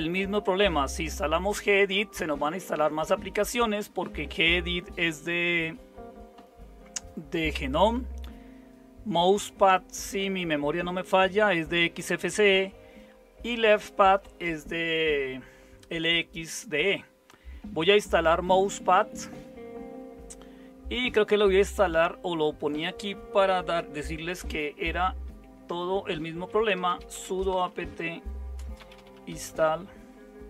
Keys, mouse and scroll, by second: 25.0 super+0, 26.5-30.4 typing.